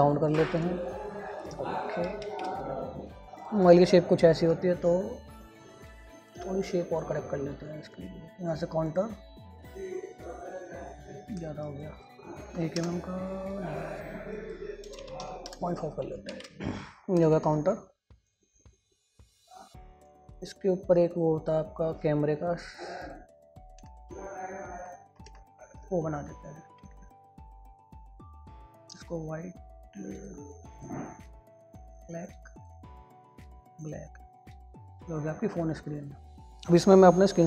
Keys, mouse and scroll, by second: 3.3 scroll up 1, 16.1 Return, 16.7 ctrl+space, 17.6 ctrl+u, 17.9 ctrl+k, 28.4 click, 36.2 scroll down 1, 36.3 click.